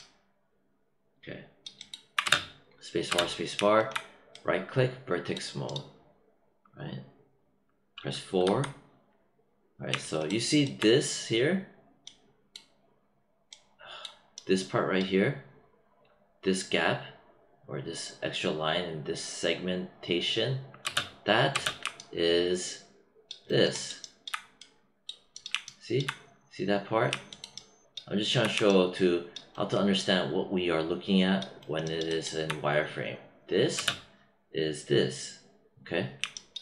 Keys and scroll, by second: 2.2 space, 20.8 space, 33.7 space.